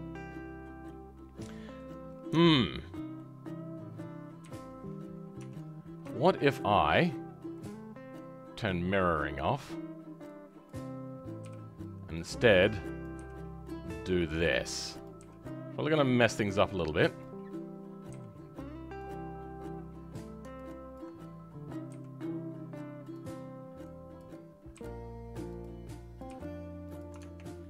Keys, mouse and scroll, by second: 3.3-4.4 middle drag, 4.4 KP_3, 4.7-5.3 scroll up 2, 5.3 Tab, 5.7-6.1 scroll up 2, 6.1-7.5 shift+middle drag, 7.5-24.7 drag, 24.7 g, 26.2 click, 26.2 g.